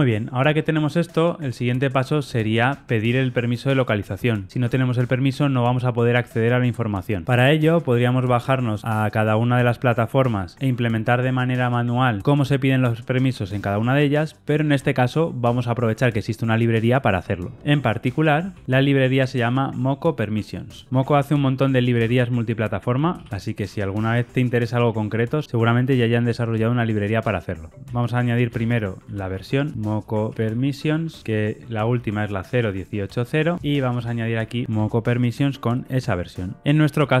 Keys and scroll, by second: 27.8 super+z, 28.4 super+z, 31.3 Tab, 32.2 ctrl+shift+Left, 34.7 Tab.